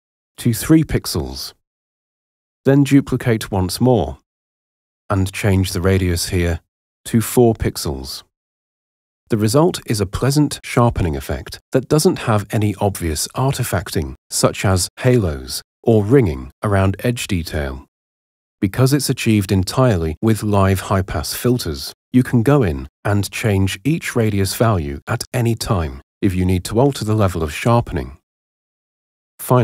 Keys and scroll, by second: 0.3 3, 0.9 Return, 3.3 super+j, 6.6 4, 7.4 Return, 10.3 super+0, 19.0 Escape, 23.7 Escape, 27.9 Escape.